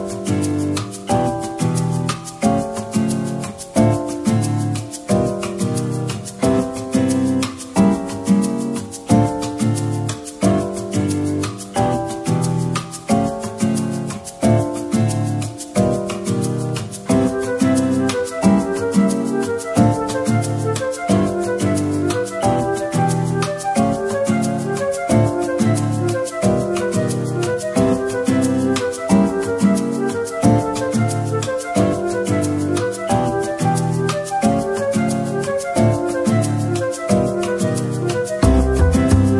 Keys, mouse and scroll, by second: 2.0 middle click, 3.3 alt+click, 3.7 middle click, 9.0 Tab, 9.6 a, 10.6 Tab, 11.3 a, 11.6 Tab, 12.2 a, 13.1 Tab, 13.6 typing, 18.4 middle click, 19.3 Tab, 21.0 middle click, 24.1-24.4 scroll up 1, 24.4 Tab, 24.8 middle click, 26.7-27.8 scroll down 1, 28.0 middle click, 28.8 shift+click, 32.3 ctrl+click, 33.7 shift+click, 34.7 ctrl+click, 36.6 ctrl+click, 37.8 typing.